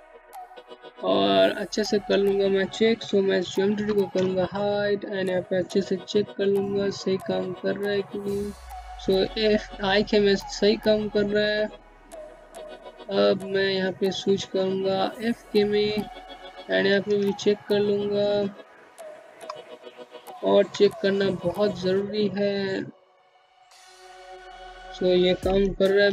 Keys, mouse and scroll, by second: 1.6 alt+2, 2.5 click, 10.9 typing, 12.6 middle click, 13.9 click, 15.3 click, 16.1 click, 18.7 e, 20.1 click, 24.0 ctrl+z.